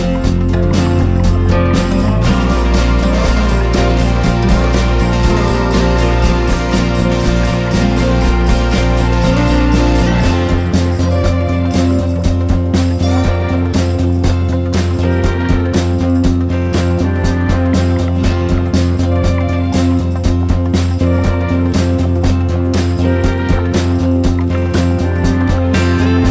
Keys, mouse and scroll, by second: 0.5 F4, 0.9 click, 3.0 click, 6.6 F4, 7.1 click, 7.3 F4, 7.6 click, 7.8 F4, 8.3 click, 10.3 F4, 10.5 click, 12.2 ctrl+g, 13.0 click, 14.1 Down, 14.4 Down, 15.2-23.3 drag, 24.1 ctrl+g, 25.8-26.3 drag.